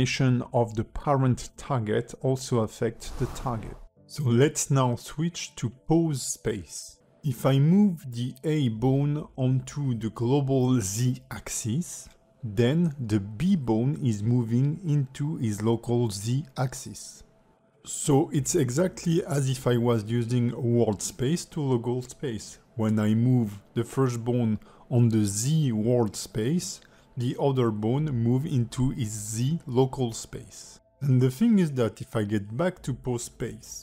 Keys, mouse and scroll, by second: 0.6 click, 4.9 click, 7.6 shift+middle click, 8.7 click, 10.8 click, 11.5 click, 12.0 alt+middle click, 13.7 click, 14.8 alt+middle click, 15.8 click, 20.2 click, 22.6 alt+middle click, 23.1 click, 23.5 alt+middle click, 24.8 click, 27.0 alt+middle click, 28.1 click, 31.9 click, 33.7 click.